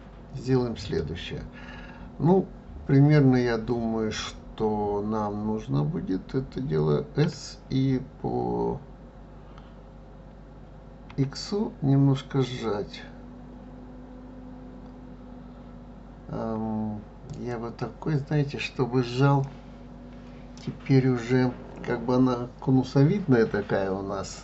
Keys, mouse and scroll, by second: 7.2 s, 19.4-22.5 middle drag.